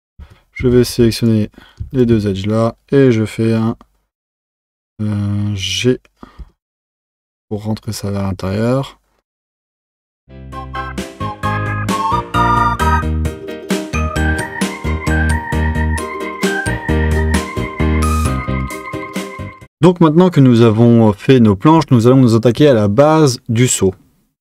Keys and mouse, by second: 0.2 Tab, 0.6 Tab, 0.9 2, 1.3 click, 1.9 shift+click, 6.4 g, 10.7 click, 11.3 s, 12.0 click, 12.4 g, 13.2 click, 14.2 click, 14.5 click, 15.2 3, 15.4 2, 15.4 click, 15.7 g, 16.6 Tab, 16.9 click, 17.8 click, 18.1 g, 18.9 Tab.